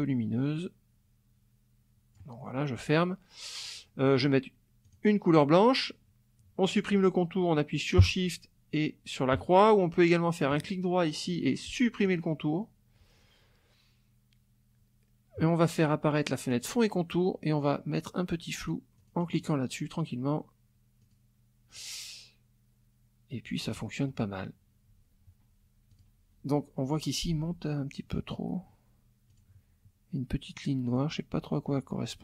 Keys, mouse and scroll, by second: 4.8 click, 10.5 right click, 12.1 click, 16.5 click, 18.6 click, 19.0 click, 21.0 click, 25.9 click, 29.3 click, 30.9 click.